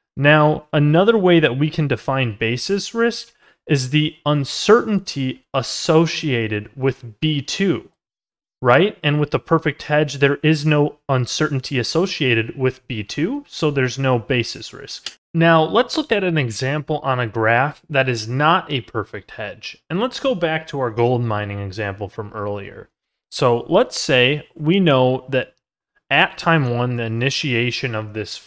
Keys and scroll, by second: 9.6 ctrl+z.